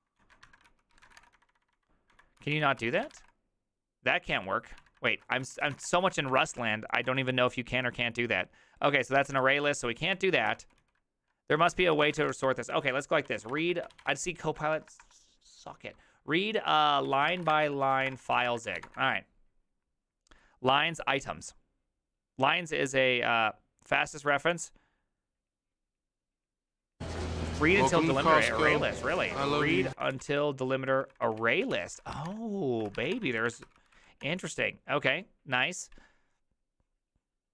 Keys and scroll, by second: 0.2 ctrl+a, 0.4-7.8 typing, 0.6 ctrl+c, 5.0 ctrl+c, 8.9-15.0 typing, 10.4 ctrl+c, 11.6 ctrl+r, 12.8 ctrl+t, 16.7-19.3 typing, 28.0 alt+{, 28.3 ctrl+c, 28.5-33.4 typing, 32.8 ctrl+c, 33.1 Return, 33.3 ctrl+a, 33.6 ctrl+c, 33.7 ctrl+c, 33.9 Up, 34.2 Return.